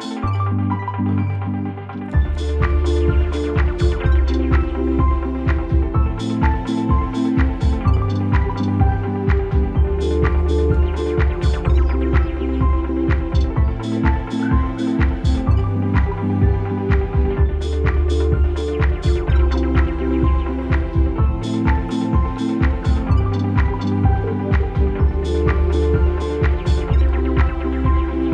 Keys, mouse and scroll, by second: 1.0 ctrl+Num_Lock, 1.0 alt+scroll up 1, 1.0 ctrl+z, 2.1 click, 3.7 click, 6.0 alt+scroll down 1, 7.0 click, 8.3 alt+scroll down 1, 10.4-18.8 drag, 18.6-21.9 typing, 20.0 click, 21.1 click, 21.8 click, 23.1 click, 24.8 alt+scroll up 1.